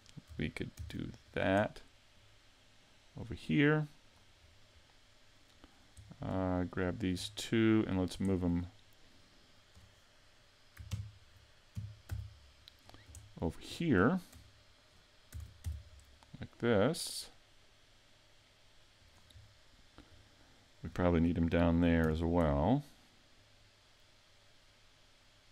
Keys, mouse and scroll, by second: 0.8 shift+d, 1.4 click, 2.2 click, 4.4-4.9 scroll down 5, 4.8 middle click, 6.1 middle click, 6.9 shift+right click, 7.2 scroll down 2, 7.7 middle click, 8.3 shift+middle click, 10.9 ctrl+KP_3, 11.8 KP_5, 12.1 z, 12.8-13.2 scroll up 5, 13.2 shift+middle click, 15.4 shift+d, 19.1 click, 19.4-20.3 scroll down 4, 20.3 shift+middle click, 22.0 shift+d.